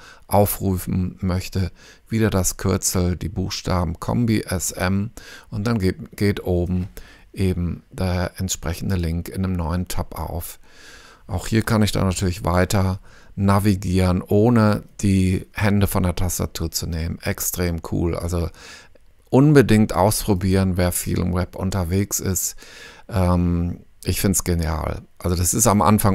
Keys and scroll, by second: 4.2-5.2 typing, 12.2 f, 21.3 ⟲.